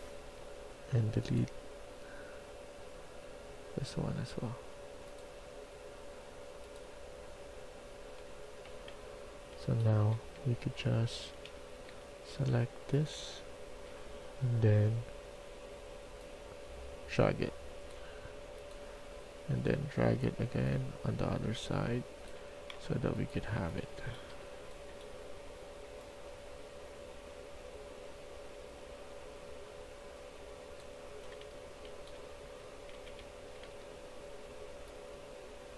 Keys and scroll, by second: 0.1 Delete, 2.9 Delete, 9.4-11.8 typing, 12.9-13.6 typing, 16.9 s, 23.2-24.2 typing, 31.0-34.1 typing.